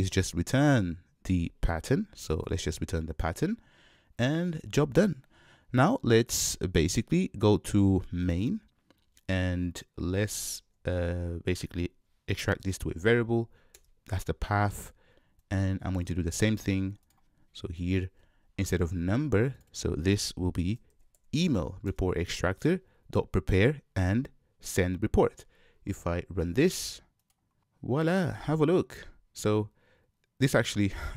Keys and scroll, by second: 3.2 Return, 10.6 super+w, 12.6 alt+super+v, 16.6 super+c, 18.1 super+v, 22.0 Return, 27.2 shift+F10.